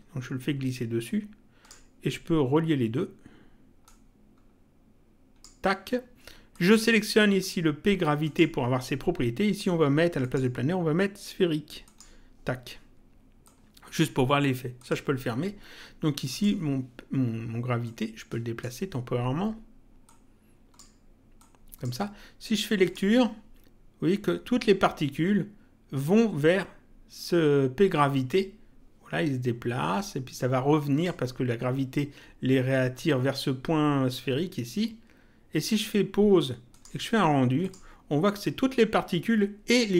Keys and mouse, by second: 3.8 click, 6.5 click, 8.2 click, 10.2 click, 11.8 click, 13.4 click, 14.7 click, 16.2 click, 17.8 click, 20.0 click, 21.4 click, 22.8 click, 29.9 click, 36.6 click.